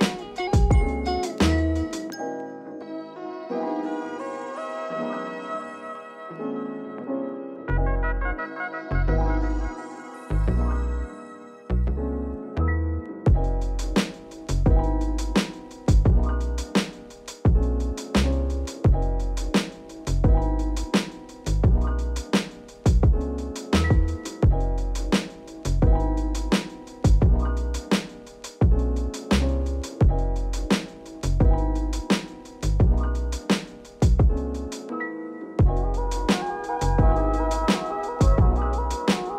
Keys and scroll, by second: 0.8 m, 2.4 m, 4.6 ctrl+alt+shift+b, 10.7 Delete, 12.2 Delete, 14.9 Delete, 15.8 Delete, 16.7 Delete, 17.3 ctrl+s, 18.2 Return, 21.6 q, 36.8 m, 38.1 ctrl+alt+shift+b.